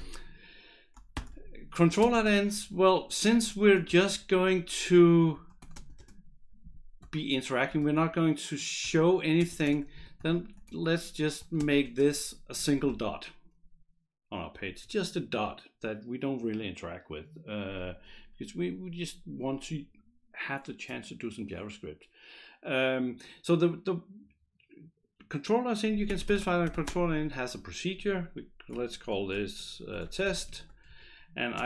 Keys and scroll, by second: 0.9-4.2 typing, 1.9 Return, 3.3 Return, 4.9 Down, 5.3 Up, 5.6 Return, 5.7 space, 7.6-13.4 typing, 8.9 Return, 11.4 Return, 14.8 Return, 25.8-27.2 typing, 29.7-31.6 typing.